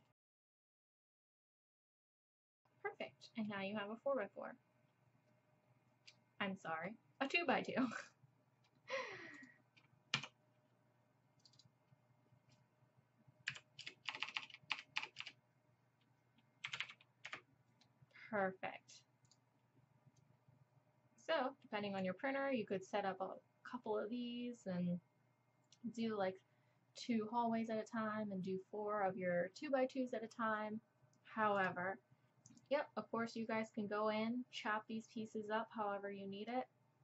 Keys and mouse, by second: 0.6 f, 1.0 f, 1.5 f, 2.5 f, 9.4 click, 10.2 Tab, 14.1 BackSpace, 14.4 BackSpace, 15.0 BackSpace, 18.2-18.5 drag, 18.5-19.3 middle drag, 19.3-32.2 drag, 20.2-22.0 right drag.